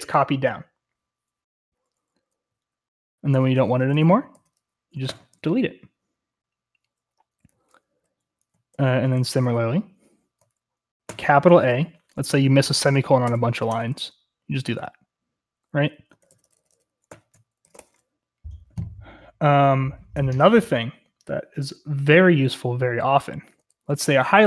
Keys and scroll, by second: 3.3-5.0 typing, 7.5-9.5 typing, 8.7 ctrl+v, 11.0 typing, 13.2 typing, 13.7 Escape, 15.4-18.2 typing, 21.5-24.4 typing.